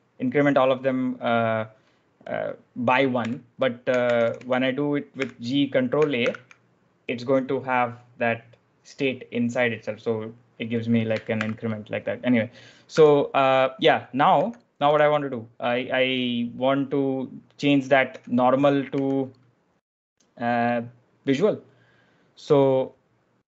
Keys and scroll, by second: 3.1-6.6 typing, 11.3 shift+w, 12.8 b, 14.0-15.2 typing, 18.8 k.